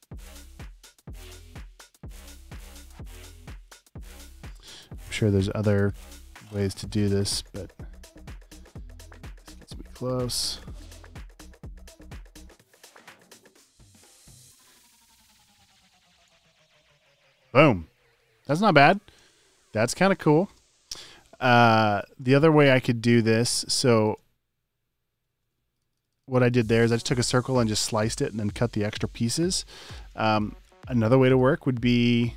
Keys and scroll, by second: 7.3 a, 9.6 BackSpace, 14.0 BackSpace, 20.2 space, 24.0 space, 25.4 space, 26.4 space, 27.8 space, 28.5 alt+super+space, 29.1 space, 29.6 space, 30.8 space, 31.1 space.